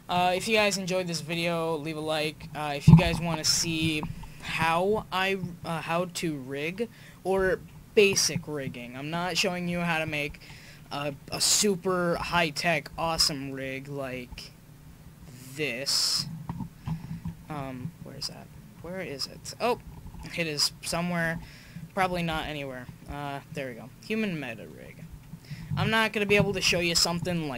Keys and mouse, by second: 4.4-5.9 middle drag, 6.2-6.6 middle drag, 7.5 middle drag, 11.8-12.4 middle drag, 12.5 middle click, 13.0 shift+a, 17.1 KP_1, 20.0 ctrl+z, 21.2 shift+s, 22.4 shift+a, 24.4 drag, 25.4-26.4 drag, 26.6 KP_5.